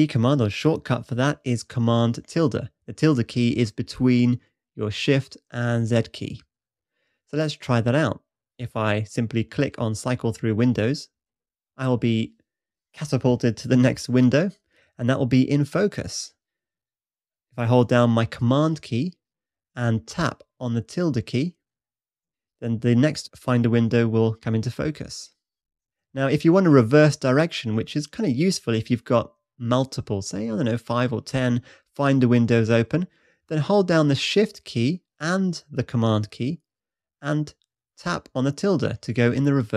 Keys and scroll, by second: 22.2 super+`, 25.8 super+`, 32.1 super+`.